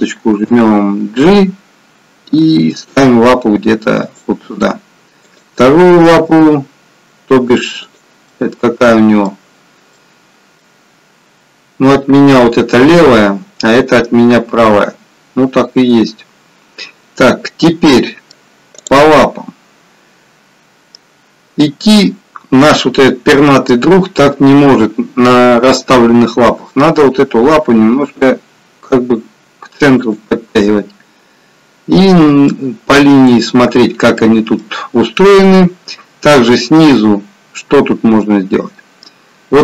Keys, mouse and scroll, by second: 5.2 click, 6.2 g, 8.9 middle click, 17.3 middle click, 18.7 click, 19.2 middle click, 21.3-21.7 scroll down 1, 26.3 g, 32.5 middle click.